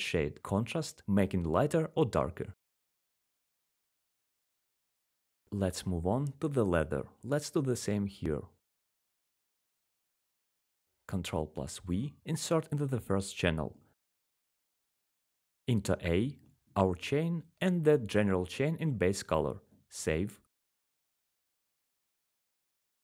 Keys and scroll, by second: 14.0 ctrl+v.